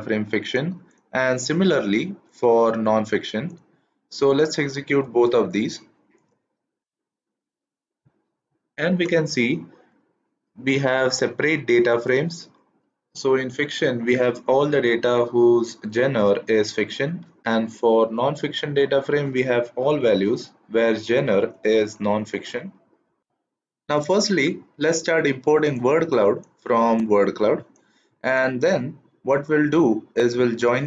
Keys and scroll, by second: 5.1 shift+Return, 6.7 shift+Return.